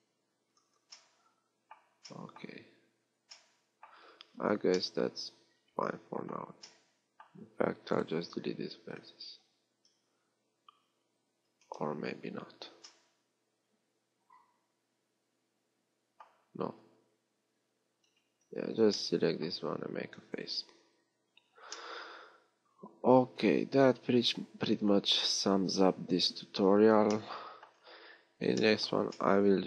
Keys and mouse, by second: 0.2 x, 2.6 z, 3.1 z, 8.4 x, 11.7 z, 16.7 z, 17.8 z, 21.5 f, 27.0 a.